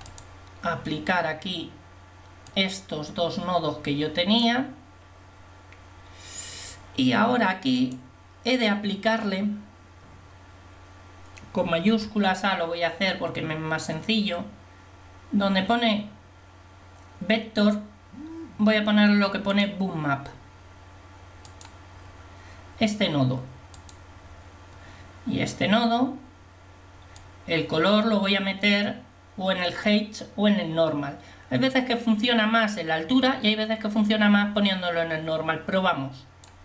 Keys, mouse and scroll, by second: 0.2 click, 24.9-36.6 drag.